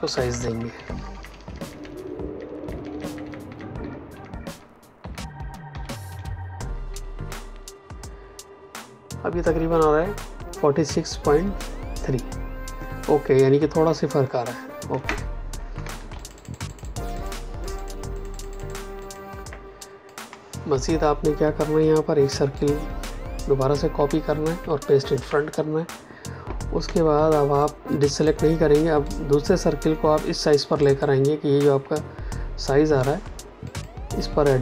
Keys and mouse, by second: 5.6 Down, 6.5 Up, 14.8 Return, 15.7 space, 16.1 ctrl+alt+click, 19.5 click, 22.5 click, 23.6 ctrl+c, 24.9 ctrl+f, 26.7 space, 27.5 ctrl+click, 29.0 ctrl+click, 30.7 ctrl+click, 33.6 click.